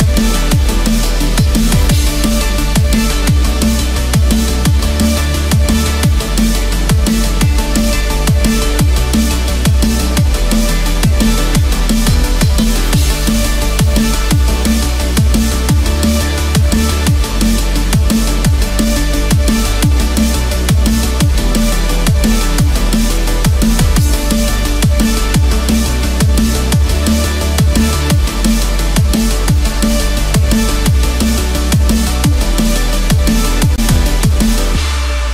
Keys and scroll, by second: 2.5 ctrl+z, 3.3 Escape, 4.2 ctrl+=, 4.3 ctrl+space, 8.1 Escape, 11.6 Return, 12.4 Escape, 16.9 Return, 17.9 Escape, 18.3 ctrl+-, 18.6 ctrl+0, 20.1 ctrl+z, 21.7 Escape, 24.5 ctrl+z, 25.0 ctrl+=, 26.8 Escape, 27.9 ctrl+=, 33.0 Return, 33.7 Escape.